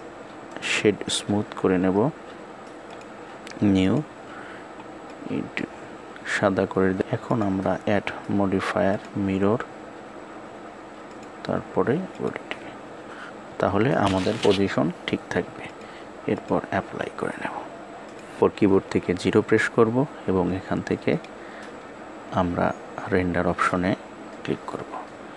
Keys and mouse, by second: 0.1 right click, 2.6 click, 3.5 click, 7.4-9.1 drag, 15.8 click, 18.1 click, 19.1 KP_0, 21.3 click.